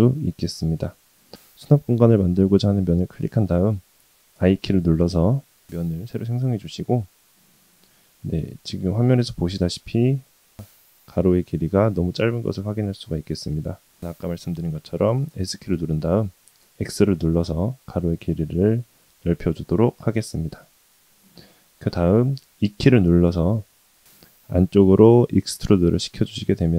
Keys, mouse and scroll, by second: 2.7 click, 4.4 i, 8.3-8.6 scroll up 2, 8.8 shift+middle click, 9.6-10.8 scroll up 1, 10.8-11.9 middle drag, 12.0-13.6 middle drag, 20.1-21.3 middle drag, 23.6 e.